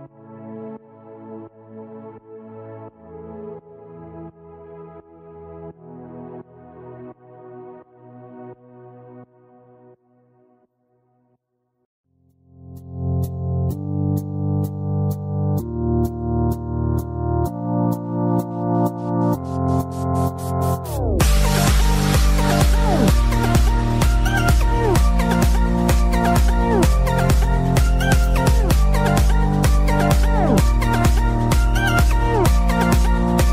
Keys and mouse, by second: 0.4 click, 9.4 click, 11.4 click, 12.6 click, 18.0 click, 19.9 click, 22.3 click, 26.1 click, 29.3 click, 31.4 click.